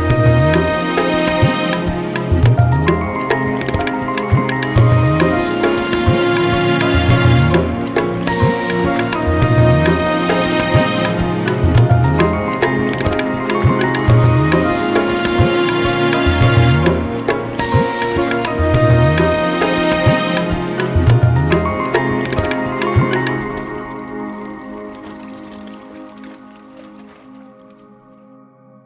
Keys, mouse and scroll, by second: 0.3 middle click, 1.9 alt+middle click, 2.4-3.1 scroll, 3.5 click, 4.2 ctrl+k, 4.6 click, 4.7-5.1 scroll, 6.8 middle click, 6.9-7.4 scroll, 7.9 middle click, 8.4 middle click, 25.1 click, 26.0 scroll down 1.